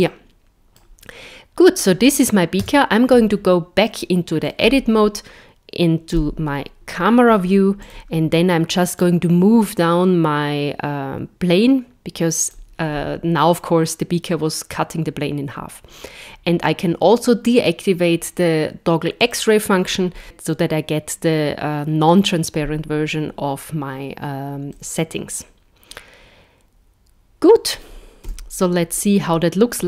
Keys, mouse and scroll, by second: 0.1 middle click, 2.7 Tab, 3.9 middle click, 4.6-5.6 scroll down 4, 6.2 KP_0, 7.3-7.7 scroll down 3, 7.8 click, 9.0 click, 19.2 click, 24.7 middle click, 28.3 KP_0, 29.2-29.8 scroll up 5.